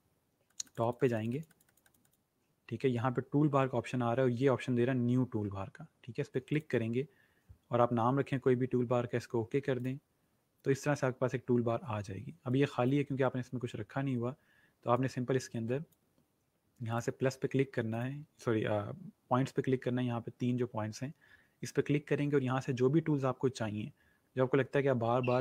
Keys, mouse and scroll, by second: 0.4 click, 1.1 click, 6.6 click, 9.7 click, 12.4 click, 22.9-23.4 scroll down 1, 23.5-23.9 scroll down 1, 25.0-25.4 scroll up 1.